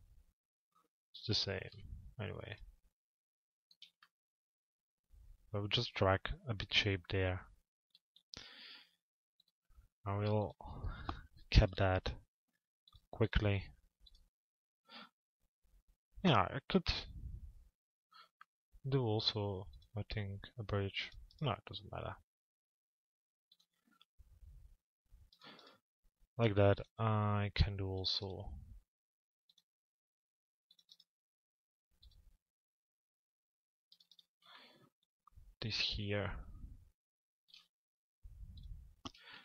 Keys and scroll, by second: 39.1 ctrl+a.